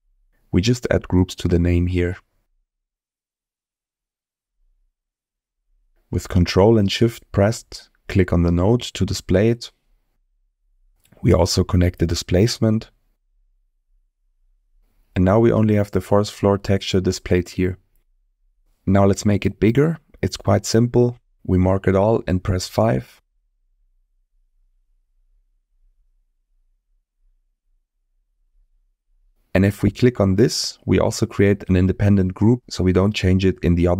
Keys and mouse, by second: 0.6 BackSpace, 0.7 BackSpace, 8.1 ctrl+shift+click, 11.2-14.8 drag, 15.9 middle click, 17.6 middle click, 19.7-20.2 middle drag, 21.0-22.5 drag, 23.5-23.8 middle drag, 24.3 middle click, 28.3 middle click, 32.5 click.